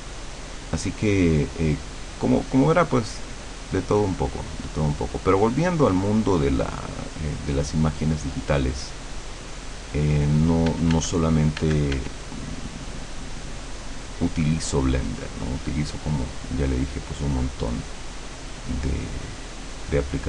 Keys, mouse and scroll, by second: 10.7 f, 11.1 click, 12.4-20.2 drag.